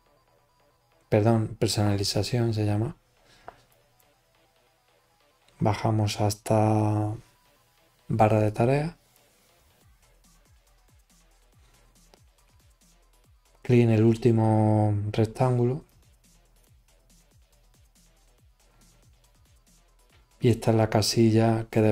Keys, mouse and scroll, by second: 3.6 click, 5.5-6.1 scroll down 5, 8.3 click, 12.3 scroll down 3, 15.8 click, 18.5-18.9 scroll down 4.